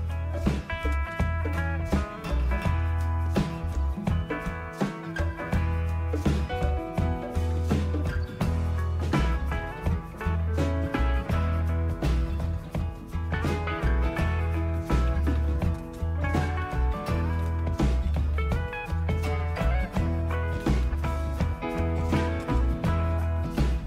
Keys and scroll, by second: 1.1-1.5 typing, 2.6 Return, 12.1 typing, 14.5-19.4 typing, 20.6-21.0 typing, 22.2-23.7 typing.